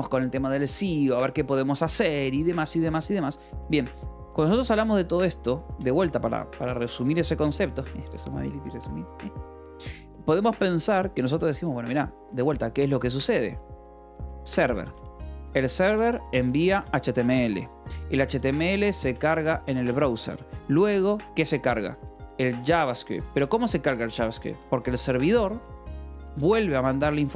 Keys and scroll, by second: 4.8 Return, 5.5 BackSpace, 14.0-17.0 typing, 18.3-20.0 typing, 21.3-27.3 typing.